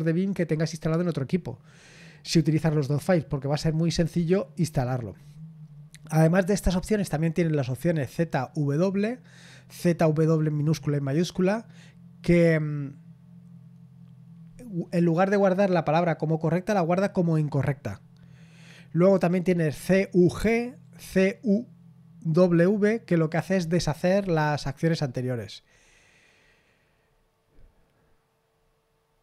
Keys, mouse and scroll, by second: 24.9-25.7 scroll down 1, 25.7-26.4 scroll down 1, 26.4-28.5 scroll down 1, 28.5-29.2 scroll down 1.